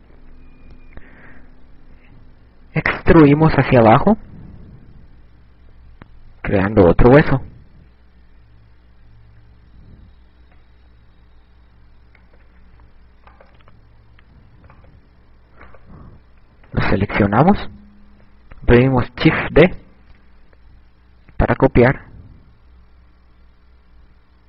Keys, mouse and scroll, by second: 0.1 right click, 2.7 e, 12.9 click, 13.6 right click, 15.3 right click, 17.2 click, 19.5 shift+d.